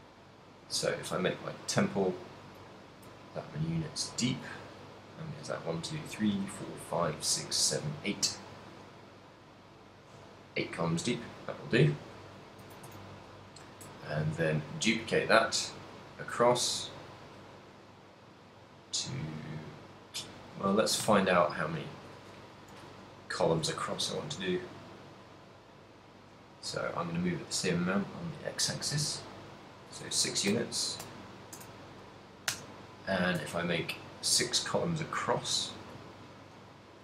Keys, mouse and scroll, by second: 0.1 middle click, 0.9 z, 1.1 middle click, 2.2 middle click, 2.8 ctrl+middle click, 3.4 ctrl+middle click, 4.7 middle click, 10.3 KP_7, 11.6 ctrl+middle click, 12.2 z, 12.7 a, 13.1 a, 15.0 shift+d, 20.8 right click, 21.2 x, 23.4 b, 24.2 shift+d, 29.6 click, 30.7 shift+r, 31.2 shift+r, 31.7 shift+r, 32.5 shift+r, 33.7 shift+middle click, 36.3 shift+middle click.